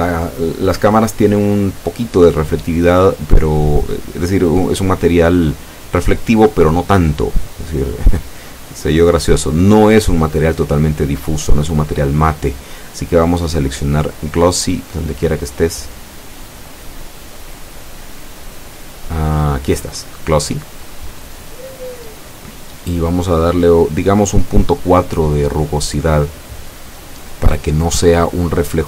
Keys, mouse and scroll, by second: 4.5-5.3 middle drag, 5.7 middle click, 6.0 scroll down 1, 6.5 scroll up 1, 7.1 scroll down 1, 7.6 right click, 14.7 click, 20.1 click.